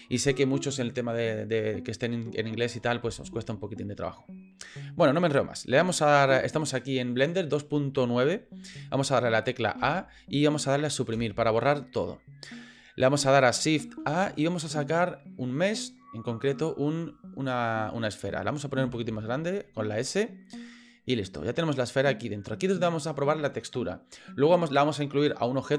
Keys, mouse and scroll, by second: 9.8 a, 11.1 Delete, 14.0 shift+a, 18.8 s, 20.9 click, 21.2-22.4 middle drag.